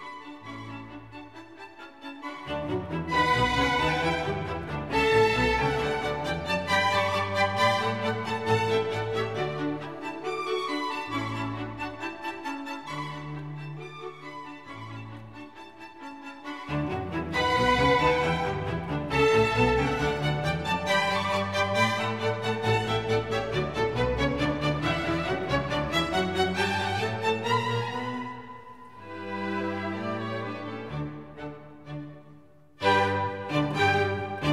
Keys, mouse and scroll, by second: 2.3-5.7 middle drag, 5.7-7.2 drag, 6.9 right click, 7.2-7.5 middle drag, 7.5-9.2 drag, 9.2 shift+z, 10.1 shift+z, 10.6 ctrl+b, 12.2 shift+z, 16.6-18.4 drag, 20.8 shift+z, 21.8 click, 26.1-27.4 drag, 27.4 shift+z, 31.1 shift+z.